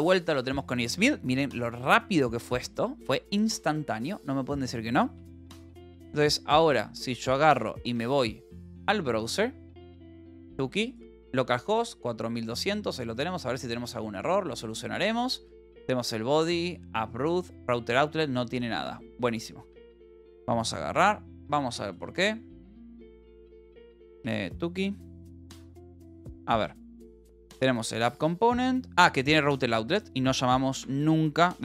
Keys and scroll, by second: 5.0-7.2 typing, 8.0 Return, 23.2 e, 24.3 Up, 25.5-28.4 typing, 28.0 Return, 29.8 a, 30.8 Escape.